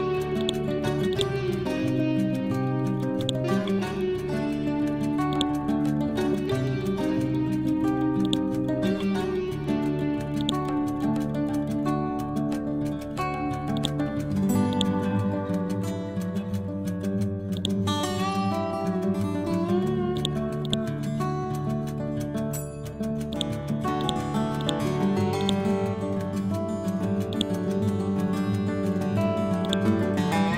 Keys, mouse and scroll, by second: 0.4-10.4 drag, 11.7 scroll down 1, 13.8-17.0 drag, 17.0 ctrl+g, 17.6 click, 18.5 scroll up 1, 20.2 ctrl+click, 21.6 ctrl+a, 23.3 click, 26.4 scroll down 1, 29.5 click, 30.0-30.5 drag.